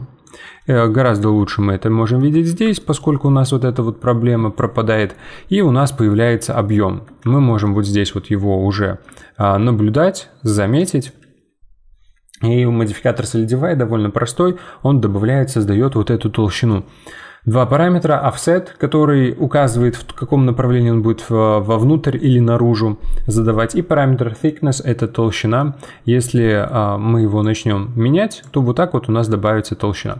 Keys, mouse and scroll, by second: 0.6 middle click, 1.2 z, 1.7 scroll down 2, 2.0 middle click, 2.3-2.8 scroll down 4, 2.8-4.0 shift+middle drag, 4.0 click, 5.0-9.6 middle drag, 9.6-11.1 typing, 9.9 click, 10.7 right click, 25.0-27.4 middle drag, 27.4-28.7 drag, 28.7-29.3 scroll down 2, 29.3-30.1 middle drag.